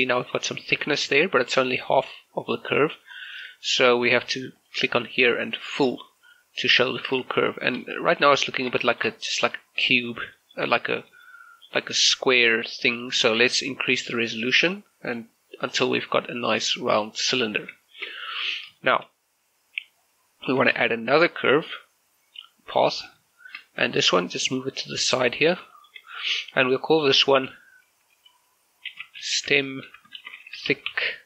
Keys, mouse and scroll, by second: 1.3 shift+middle click, 2.2-2.6 scroll up 1, 2.6 middle click, 2.9-3.2 scroll up 1, 3.2 middle click, 4.6 click, 7.6 shift+middle click, 8.6 scroll up 1, 8.9 shift+middle click, 10.4 shift+middle click, 10.8 middle click, 11.3-14.8 shift+middle drag, 14.8 click, 17.3-17.8 scroll down 1, 17.9 shift+middle click, 20.8 shift+a, 22.8 click, 23.4 shift+middle click, 24.4-25.8 drag, 25.8 shift+middle click, 26.9 click, 29.0-31.2 typing.